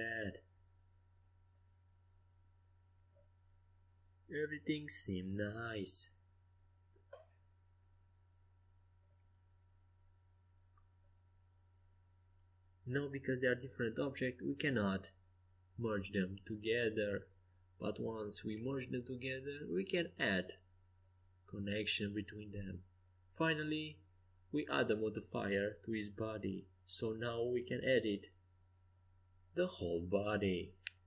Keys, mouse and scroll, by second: 7.6-9.2 right drag, 8.2-10.1 middle drag, 9.4 click, 9.4 right click, 10.1-11.3 drag, 10.6 middle click, 10.6-13.0 right drag, 12.3 ctrl+a, 13.1 a, 14.0 Tab, 14.8 middle click, 17.8 middle click, 17.9 middle click, 18.8-23.7 right drag, 22.0-23.8 drag, 24.9 click, 26.8 g, 27.7 Tab, 28.5 Tab.